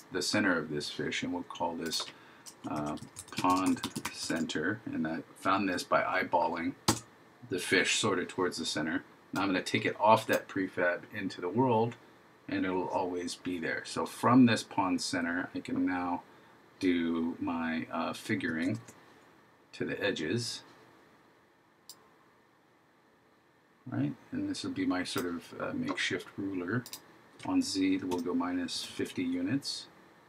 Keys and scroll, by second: 2.8 shift+p, 3.7 shift+c, 18.7 super+d.